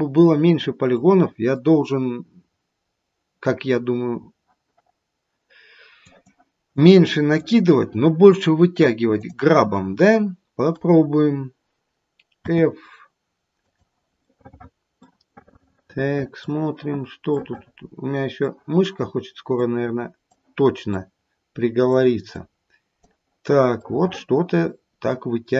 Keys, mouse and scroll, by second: 0.9 middle click, 2.2-2.6 scroll up 2, 2.8-4.0 scroll up 1, 6.0 click, 6.7 click, 7.3 click, 9.2 click, 15.0 middle click, 15.4 middle click, 16.1 middle click, 17.4 middle click, 19.5 click, 20.9 click, 22.3 click, 23.8 middle click, 25.0 middle click.